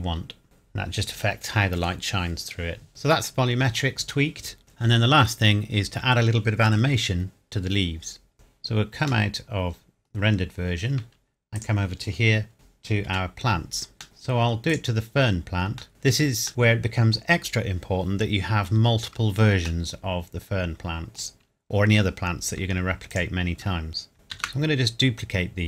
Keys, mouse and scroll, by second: 0.4-1.8 scroll down 1, 2.9-4.2 scroll down 1, 4.6-5.9 scroll down 1, 8.3 click, 9.3 middle click, 10.1 scroll down 1, 11.6 click, 13.1 KP_Decimal, 13.8 scroll up 1, 14.0 middle click, 14.7 click, 15.9 KP_Decimal, 16.5 middle click, 18.3 scroll down 1, 19.8 middle click, 23.1 shift+click, 24.3 shift+d.